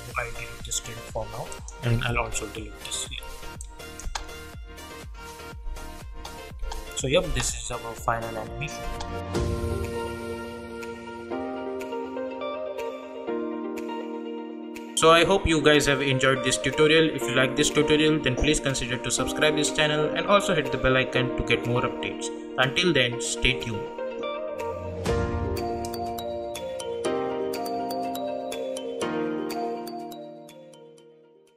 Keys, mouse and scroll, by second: 1.5 click, 4.0 space.